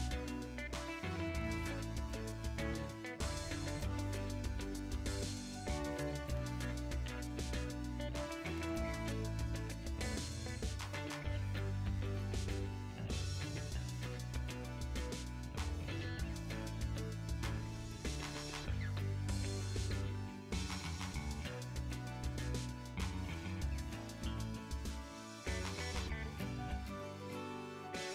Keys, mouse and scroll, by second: 0.1 g, 0.4 click, 0.5-2.4 middle drag, 1.4 g, 2.4 3, 2.4-4.1 drag, 4.1 s, 5.0-6.9 middle drag, 5.9 a, 6.9 click, 7.0 r, 8.2 click, 8.2-11.4 middle drag, 8.9 ctrl+z, 9.8 shift+a, 11.4 click, 11.7 Tab, 12.4 Tab, 13.6-16.0 middle drag, 14.0 Tab, 16.0 click, 16.4-17.5 middle drag, 17.5-19.4 shift+drag, 19.4 g, 20.0-23.8 middle drag, 20.6 Tab, 21.4 g, 22.5-22.9 scroll down 1, 22.9 scroll up 1, 23.8 click, 23.9-26.2 middle drag, 25.8 x, 26.2 click, 26.3 Tab, 26.4 middle click, 26.6 shift+click, 27.0-28.0 shift+middle drag, 27.5 KP_7, 28.0 ctrl+right click.